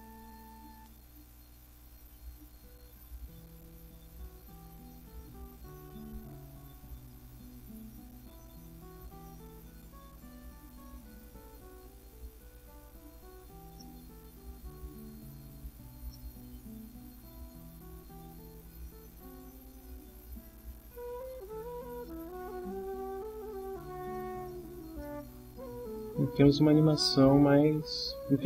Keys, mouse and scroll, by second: 1.6-3.5 drag, 4.5-6.4 drag, 9.3 click, 10.3 click, 13.8 middle click, 14.9 middle click, 16.1-17.4 middle drag, 20.4-21.4 drag, 22.1 middle click, 25.0-26.0 middle drag.